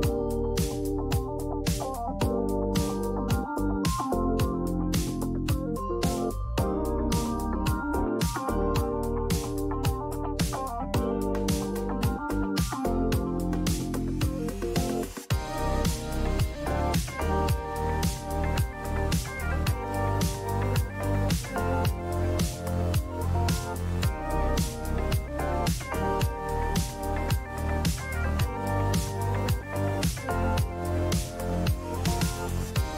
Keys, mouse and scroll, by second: 0.4 click, 1.4 click, 4.4 click, 5.4 shift+Return, 7.3 click, 8.9 click, 9.7 click, 10.1 click, 11.6 click, 11.7 click, 13.4 click, 14.9 click, 15.7 click, 20.1 click, 20.6 typing, 20.9 click, 22.9 click, 24.4 click, 25.4 typing, 29.0 click, 30.0-30.9 typing, 30.4 click.